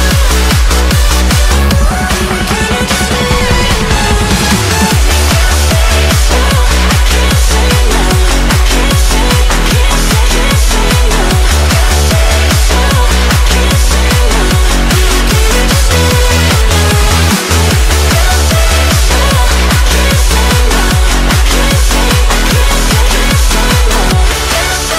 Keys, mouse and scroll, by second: 0.1-1.5 drag, 2.3-4.1 drag, 5.2-7.8 drag, 8.5-9.9 drag, 10.7-11.9 drag, 11.9 middle click, 12.8 click, 13.8-16.8 drag, 17.2 click, 18.3-20.0 drag, 20.7-22.3 drag, 23.1-24.9 drag.